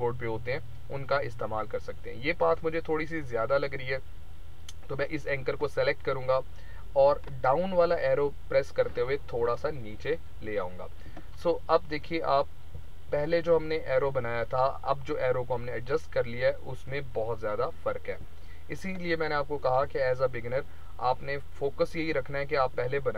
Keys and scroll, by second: 7.2 Down, 12.2 ctrl+-, 19.7 Delete.